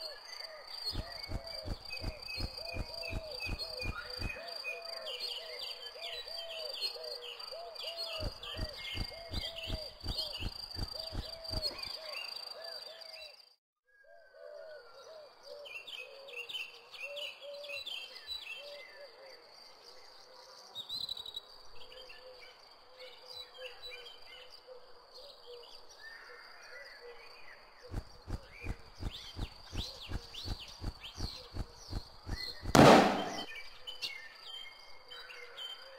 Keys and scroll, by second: 0.0-2.6 typing, 5.6-6.9 typing, 8.1 space, 10.8 m, 11.8 n, 14.8 w, 17.3 n, 18.1 d, 20.0 c, 23.3-24.8 typing, 27.8 m, 28.3 s, 29.6 m, 30.1 w, 32.2 m, 32.8 q.